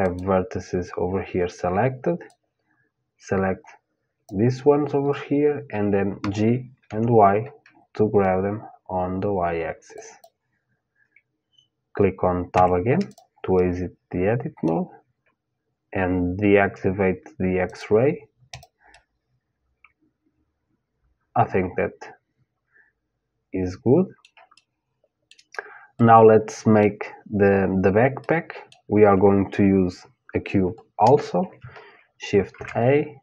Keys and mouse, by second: 1.9-3.9 drag, 5.8 g, 9.7-12.2 drag, 12.2 Tab, 12.7 click, 13.2-15.3 middle drag, 17.3-18.5 drag, 18.5-19.6 middle drag, 19.6 click, 20.1 middle click, 24.2-27.6 middle drag, 27.8-30.7 middle drag, 32.1 shift+a.